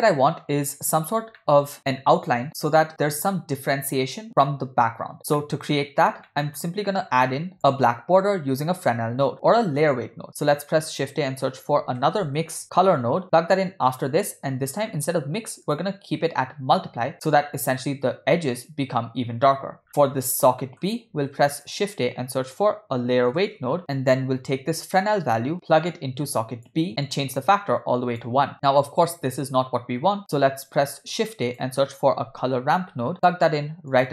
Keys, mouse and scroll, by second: 0.2-0.9 scroll up 2, 0.9-1.2 scroll up 1, 1.4-1.7 shift+middle drag, 5.1 scroll down 2, 5.4 middle click, 6.2 middle click, 7.2 click, 10.1 shift+a, 14.5-15.5 scroll up 4, 15.6-17.3 drag, 19.8 middle click, 19.8-20.6 scroll down 2, 20.6 middle click, 21.1 shift+a, 23.8 click, 25.4-26.8 drag, 27.0-28.2 drag, 30.2 click, 30.7 shift+a.